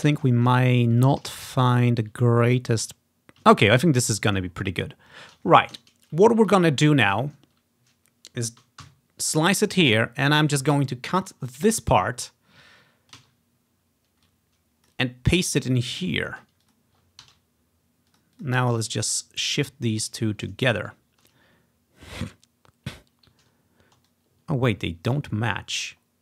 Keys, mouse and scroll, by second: 0.2-2.6 typing, 3.8-4.4 ctrl+scroll up 2, 4.3-5.0 typing, 4.4 ctrl+scroll down 3, 6.5 ctrl+scroll down 1, 7.2-7.9 typing, 8.9 ctrl+i, 10.3-12.3 drag, 12.6-14.1 ctrl+scroll down 1, 13.3 ctrl+x, 14.3 click, 15.8 click, 16.3 ctrl+scroll up 1, 16.6-18.4 drag, 17.3 ctrl+v, 18.4 click, 20.7 ctrl+scroll up 1, 21.0-22.8 drag, 24.2-26.2 drag, 25.4-26.1 ctrl+scroll down 1, 26.1 ctrl+scroll up 1.